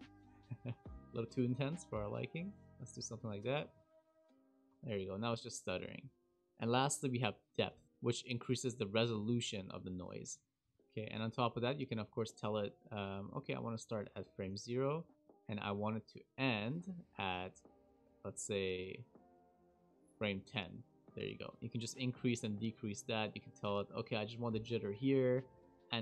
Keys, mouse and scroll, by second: 0.7 space, 1.2 click, 3.3 click, 3.6 space, 4.7 space, 8.3 click, 11.5 click, 15.2 click, 19.4 click, 21.4 click, 23.8 click.